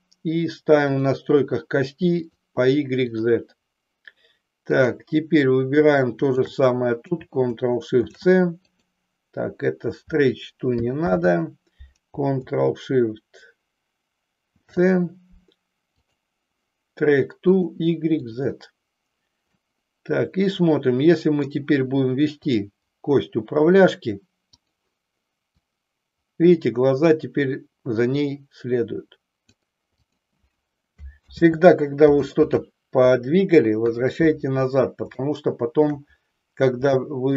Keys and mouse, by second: 0.8 click, 2.1 click, 3.0 click, 8.0 ctrl+shift+c, 11.1 ctrl+z, 14.4 ctrl+shift+c, 17.6 click, 19.5-21.5 middle drag, 22.4 click, 24.5 click, 25.6-29.6 drag, 30.1 click, 31.4 ctrl+z, 32.4 ctrl+z, 33.8 KP_3, 35.2 shift+middle click, 36.9 shift+middle click.